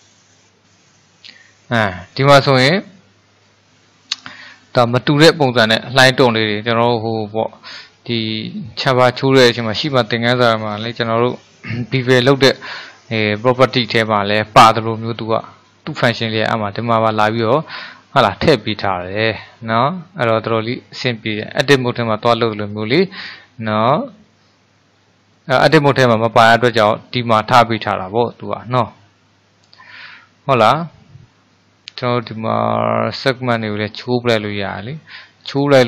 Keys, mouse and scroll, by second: 15.2-17.2 middle drag, 17.2-17.8 scroll up 2, 17.8-18.3 scroll down 1, 18.3-21.5 middle drag, 23.2-27.4 middle drag, 28.2-31.2 middle drag, 32.3-35.4 drag.